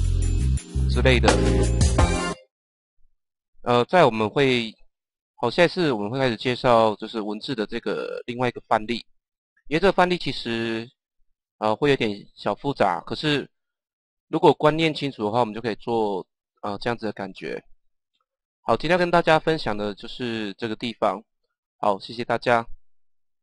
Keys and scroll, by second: 10.6 u.